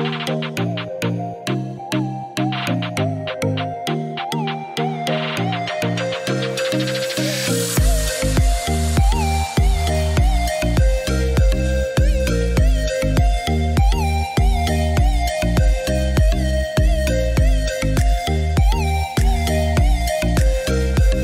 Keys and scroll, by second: 10.5 3, 10.9 6, 11.3 Return.